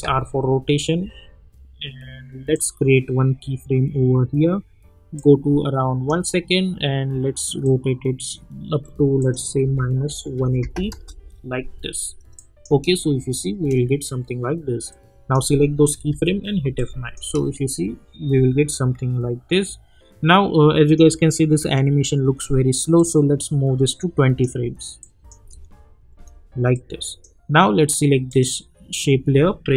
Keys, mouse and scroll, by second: 2.5 click, 5.1-9.2 drag, 9.6 -, 10.9 Return, 12.3 click, 12.7 space, 14.9 click, 16.1 F9, 16.7 click, 17.2 space, 20.8-25.0 drag, 25.4 space, 26.7-28.3 drag.